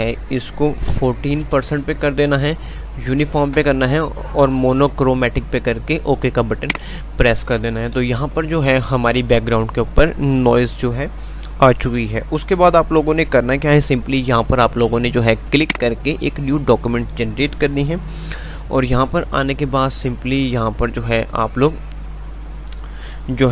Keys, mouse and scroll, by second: 8.8 F5, 8.8 typing, 10.8 typing, 15.5 click.